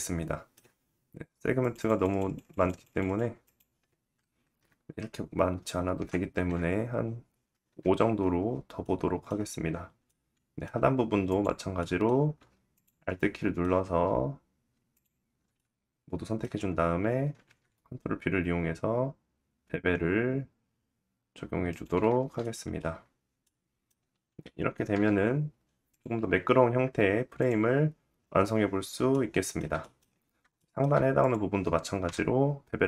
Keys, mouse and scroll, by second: 1.1-7.3 drag, 1.1 scroll down 1, 7.3-10.4 middle drag, 9.6 Tab, 9.9-10.4 scroll up 1, 10.8 click, 11.0-12.0 middle drag, 12.0 alt+click, 12.3 alt+click, 13.6 middle click, 13.9 alt+click, 14.4 alt+shift+middle click, 14.5 alt+shift+click, 14.6 alt+shift+middle click, 15.8-25.0 middle drag, 17.0 ctrl+b, 21.7 Tab, 22.3-22.7 scroll down 2, 23.0-24.5 scroll down 1, 24.5 /, 25.4 click, 25.7-26.9 middle drag, 26.9 click, 27.0-30.4 middle drag, 29.2 shift+scroll down 1, 29.6-30.1 scroll up 2, 30.7 click, 31.6 /, 31.7 scroll up 1.